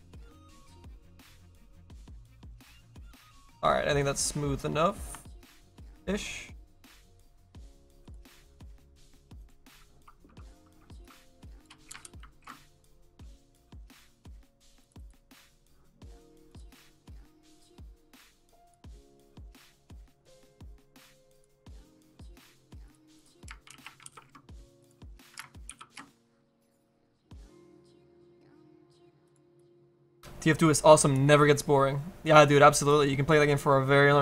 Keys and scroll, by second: 3.2 ctrl+shift+z.